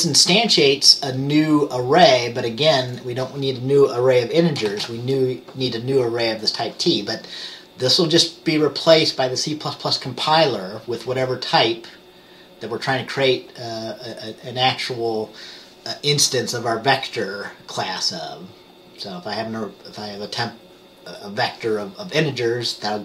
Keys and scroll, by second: 4.8 ctrl+s.